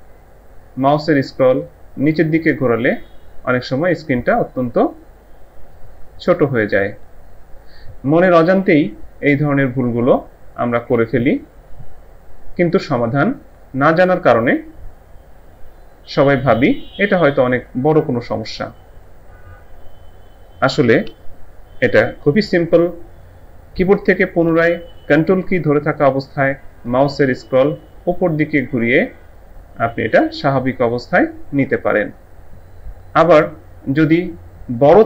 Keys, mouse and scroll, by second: 1.0 ctrl+scroll down 1, 27.0-27.5 ctrl+scroll up 1, 29.5-29.9 ctrl+scroll up 1.